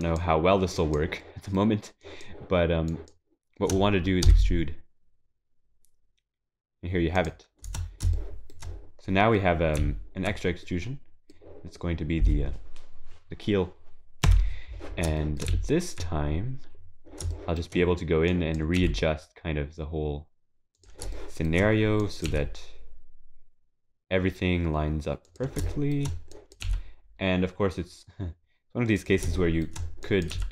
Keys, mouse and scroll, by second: 0.0 shift+click, 0.8 shift+click, 1.2 shift+middle click, 3.8 shift+click, 8.1 shift+middle click, 9.0-9.4 scroll down 4, 9.4 middle click, 9.8 z, 10.6 middle click, 14.2 KP_3, 15.2 shift+middle click, 15.5 z, 16.2 scroll up 2, 17.3 shift+middle click, 17.3 scroll up 6, 18.3 click, 18.8 g, 21.1 shift+middle click, 22.0 click, 24.2 g, 25.7 shift+middle click, 26.3 click, 26.6 g, 29.4 shift+middle click, 30.0 click, 30.3 g.